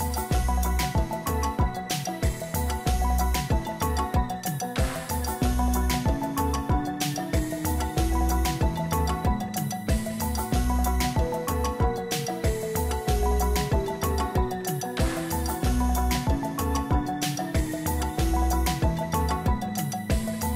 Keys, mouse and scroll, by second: 6.0 double click, 6.4 double click, 7.3 double click.